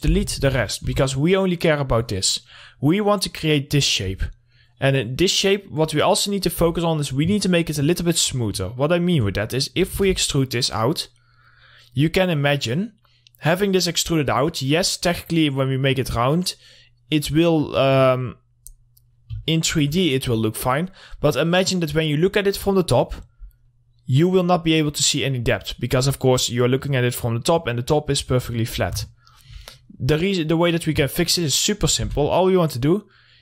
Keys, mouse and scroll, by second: 1.3 2, 2.7-6.4 drag, 7.1 w, 7.2 middle click, 7.5 scroll up 1, 8.0 alt+middle click, 8.7-9.0 scroll down 1, 9.6 alt+middle click, 10.4 e, 10.6 right click, 11.4-15.3 drag, 15.3-17.0 scroll down 1, 18.3 scroll down 1, 19.0 scroll up 1, 19.9-23.2 alt+middle drag, 23.5 scroll up 1, 24.1-29.1 middle drag, 29.1 scroll down 1, 29.6 alt+middle click, 30.4 scroll up 1, 31.1 middle click, 31.2 scroll down 1, 31.5 alt+middle click, 32.4 r.